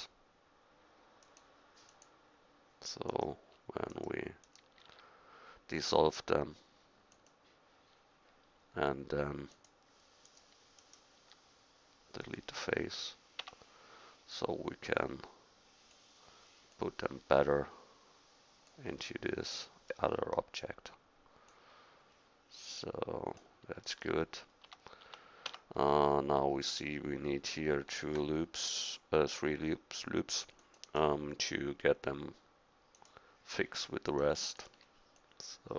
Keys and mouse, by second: 4.9 x, 11.2 x, 13.4 Tab, 19.0 middle drag, 19.3 middle click, 21.5 click, 23.4-24.3 middle drag, 24.7 Tab, 25.0 Tab, 25.5 Tab, 28.0 ctrl+r, 32.9-35.7 drag, 34.1-35.7 right drag.